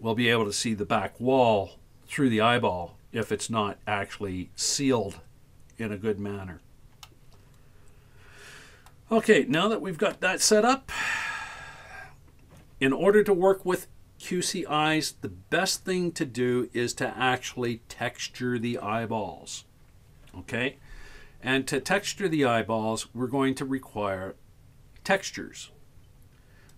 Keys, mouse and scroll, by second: 1.6-6.0 scroll up 3, 6.6-7.1 scroll down 3, 7.1-8.9 middle drag, 9.6-10.1 shift+middle drag, 10.8-11.1 scroll down 2, 11.6 Tab.